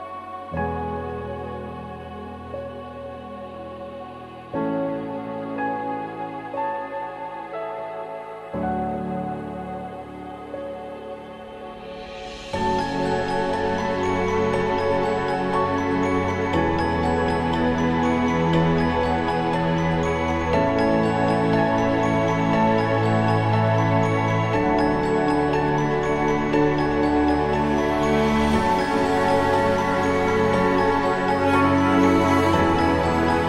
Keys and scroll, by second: 4.5 ctrl+d, 6.0 ctrl+=, 6.1 ctrl+=, 8.8 ctrl+-.